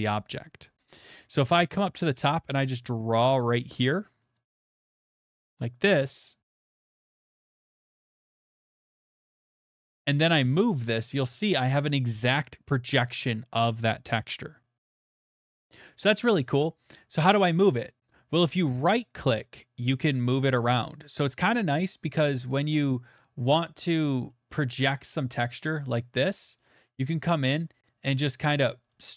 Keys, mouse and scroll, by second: 4.2-7.7 drag, 9.2 click, 15.5 middle click, 17.1 right click, 23.1 right click, 24.3 right click, 25.2 right click, 25.2 middle click, 25.7 click, 26.0 click, 26.6 click, 27.6 right click, 28.9 click.